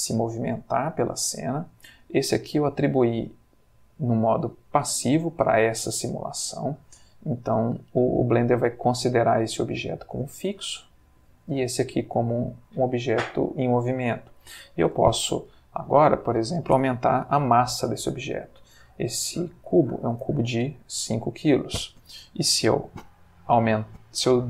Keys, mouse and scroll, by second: 0.8 Escape, 2.2 click, 9.5 g, 10.3 Escape, 11.2 click, 12.6 middle click, 16.1 click, 19.7 5, 20.1 Return.